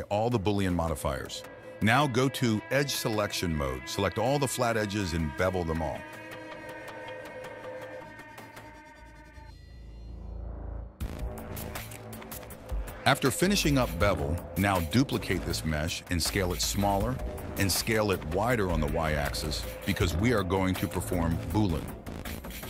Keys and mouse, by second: 1.4 Tab, 2.5 middle click, 3.2 shift+middle click, 3.9 shift+middle click, 4.9 click, 5.6 ctrl+b, 7.8 click, 9.0 click, 9.2 shift+click, 9.7 shift+click, 9.9 shift+click, 10.2 ctrl+b, 11.5 shift+click, 12.2 ctrl+b, 12.9 Tab, 13.3 KP_1, 13.7 g, 14.7 click, 15.5 click, 15.9 shift+d, 16.4 s, 19.4 s, 21.4 shift+click, 21.8 ctrl+shift+b, 22.4 click.